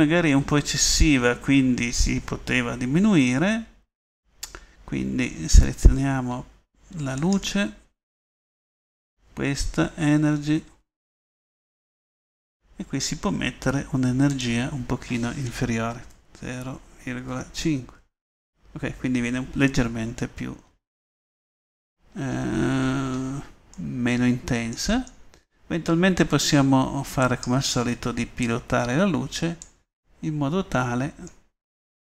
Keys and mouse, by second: 5.6 middle click, 14.4-15.4 middle drag, 15.4-16.4 right drag, 16.4-20.2 middle drag, 23.8 middle click, 24.0 middle click, 24.3 middle click, 25.7 middle click, 30.2 middle click, 30.4 middle click, 30.8 middle click.